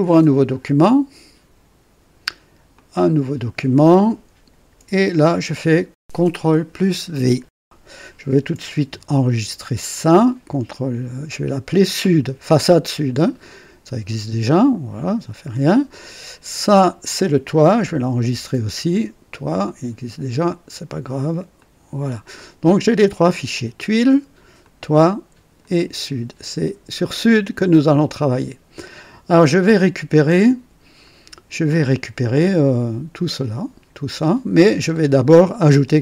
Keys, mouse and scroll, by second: 2.7 click, 6.1 ctrl+v, 6.1 ctrl+v, 9.9 ctrl+s, 9.9 ctrl+s, 11.9 click, 13.3 click, 14.5 click, 16.2 click, 18.0 ctrl+s, 19.5 click, 20.4 click, 21.5 click, 23.4 click, 24.5 click, 25.5 click, 28.1-28.8 right drag, 30.9 click, 34.8-35.2 scroll up 1, 35.8-36.0 right drag.